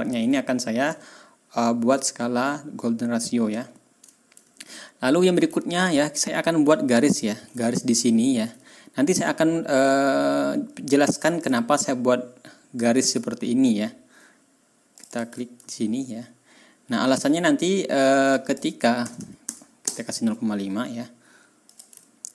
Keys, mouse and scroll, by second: 0.9 ctrl+scroll down 2, 2.0-2.3 ctrl+scroll down 2, 2.6-2.9 ctrl+scroll up 2, 3.2 ctrl+scroll down 2, 3.6 ctrl+scroll up 2, 4.7 ctrl+scroll down 2, 5.5-6.0 ctrl+scroll down 4, 7.1 ctrl+scroll up 2, 8.6 ctrl+scroll down 2, 9.6 ctrl+scroll up 2, 11.3 click, 12.9 ctrl+click, 13.2 ctrl+scroll down 2, 14.9 ctrl+click, 15.8-16.7 ctrl+scroll up 4, 18.3 click, 18.9 KP_0, 19.1 KP_Decimal, 19.4 KP_5, 19.8 Return, 21.6 ctrl+middle click, 22.0 ctrl+scroll down 2.